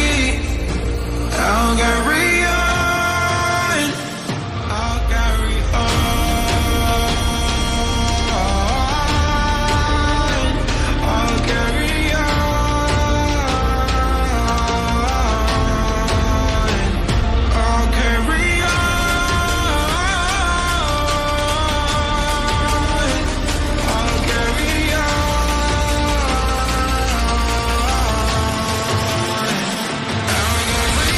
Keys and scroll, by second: 7.8 ctrl+j, 8.2 shift+space, 10.2 shift+space.